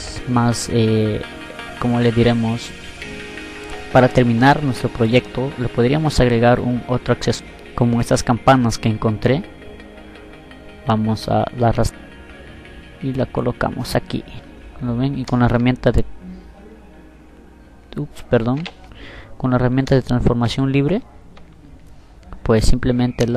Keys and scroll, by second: 19.1 ctrl+t.